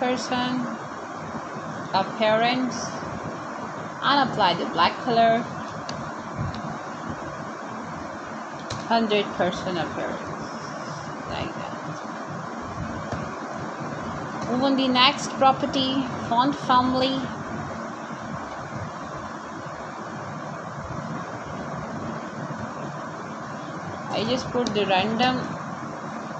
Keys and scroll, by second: 0.4-1.9 typing, 6.8-9.9 typing, 12.2-14.3 typing, 16.3 y, 20.6 ;, 21.4 BackSpace, 22.0 ', 24.7 ', 25.1 Right.